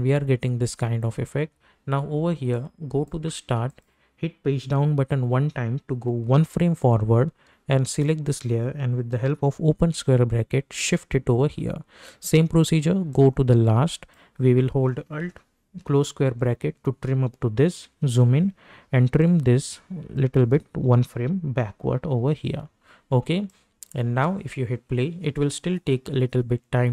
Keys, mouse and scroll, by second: 2.8 click, 5.9 =, 6.4 Page_Down, 7.8 click, 10.8 [, 13.1-16.3 drag, 16.3 alt+], 17.7 =, 18.3 =, 19.2-21.7 drag, 21.7-22.8 typing, 23.5 click, 24.0 space.